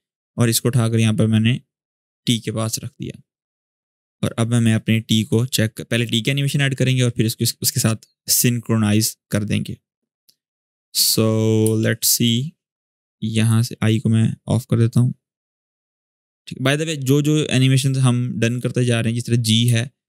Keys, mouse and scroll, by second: 7.7-9.3 scroll down 1, 10.3-10.9 click, 11.0-11.4 scroll down 1, 11.4 space, 11.5 click, 11.9 space, 12.5-13.4 drag, 18.2 click, 19.1 scroll down 1, 19.4 space, 19.5-20.0 click, 19.9 space.